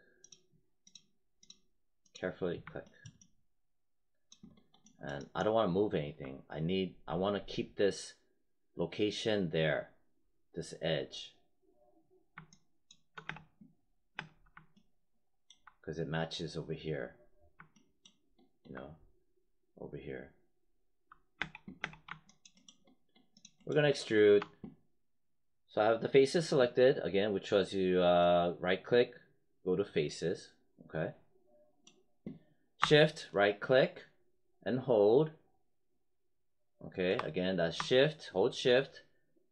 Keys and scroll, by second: 13.2 space, 21.3 space.